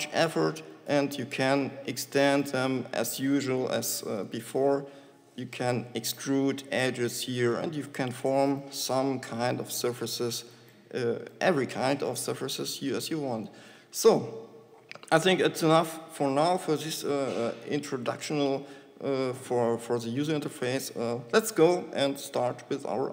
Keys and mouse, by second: 1.9 shift+Tab, 3.9 g, 5.0 e, 6.6 e, 9.2 e, 12.1 e, 14.9 Tab, 16.9 Delete, 22.9 shift+a.